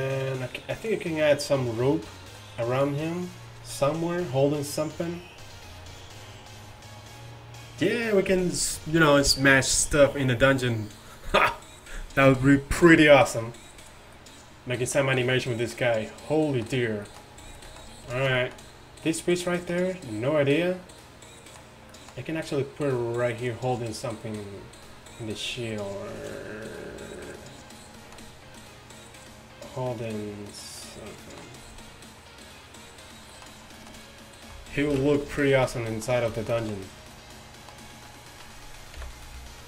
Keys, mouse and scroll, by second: 2.6-3.3 middle drag, 14.2-16.6 middle drag, 19.1-19.5 right drag, 19.5-21.2 middle drag, 27.8-28.1 middle drag, 30.9-31.4 middle drag, 34.9 alt+h, 35.6 a, 39.0 KP_1.